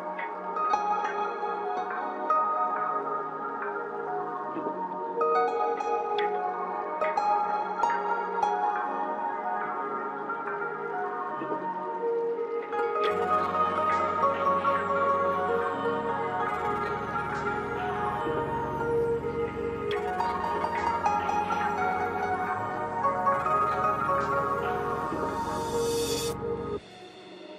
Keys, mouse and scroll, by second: 2.3 scroll up 1, 4.4 click, 4.6 typing, 6.3-14.2 drag, 14.2-21.4 drag, 23.7 click, 26.7 typing.